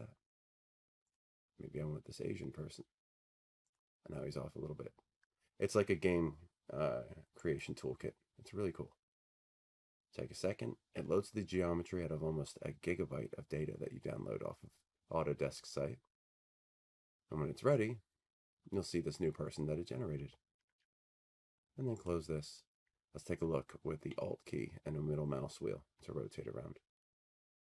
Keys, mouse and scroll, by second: 0.0 click, 1.2 click, 3.8 click, 5.9 click, 7.8-9.8 drag, 20.2 click, 22.2 click.